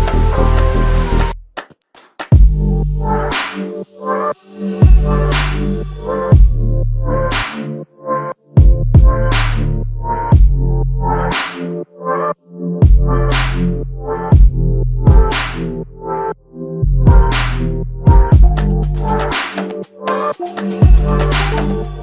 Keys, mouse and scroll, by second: 5.3 alt+click, 14.0 alt+click, 18.6 alt+click.